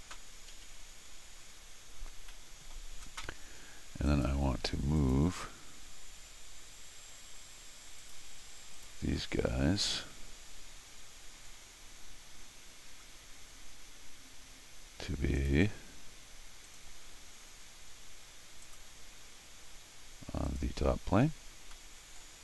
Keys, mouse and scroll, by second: 2.3 middle click, 4.1 click, 5.0 click, 8.0 click, 8.7 click, 15.4 click, 16.0 scroll down 2, 16.6 click, 18.6 click, 20.5 click, 21.3 scroll down 1, 21.7 middle click.